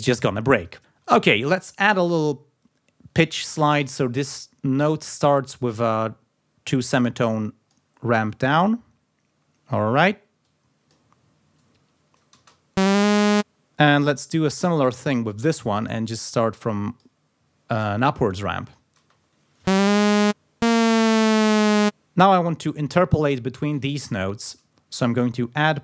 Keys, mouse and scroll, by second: 1.3 ctrl+scroll up 2, 3.8 d, 4.7 click, 6.7-7.9 drag, 10.4 click, 11.1 scroll up 2, 12.4 space, 14.0 click, 15.0 click, 15.9 click, 16.3 click, 18.7 click, 19.0 space, 22.0 space, 25.0 click, 25.6 click.